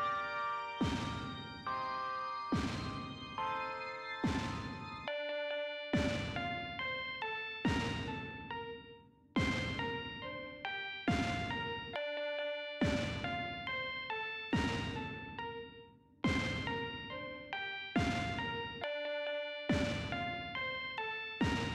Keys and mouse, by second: 0.8-3.4 drag, 5.4 click, 8.0-9.7 drag.